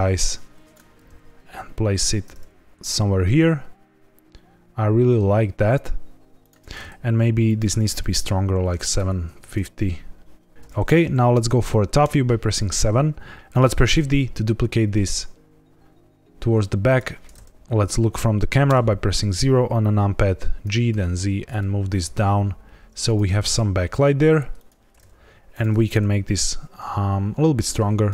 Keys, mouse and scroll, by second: 0.9 g, 1.0 z, 6.3 click, 7.4 click, 11.9 KP_7, 12.7 scroll down 3, 13.3 click, 13.3 x, 13.9 shift+d, 16.8 click, 18.6 KP_0, 20.6 g, 20.8 z, 23.0 click, 23.3 g, 24.5 click, 25.4 click.